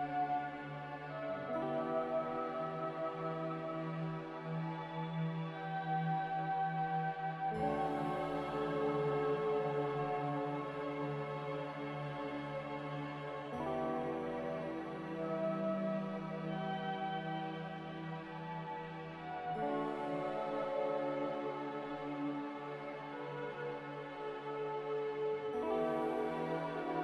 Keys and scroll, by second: 7.2-7.9 typing, 18.1-19.0 typing, 20.8-22.1 typing.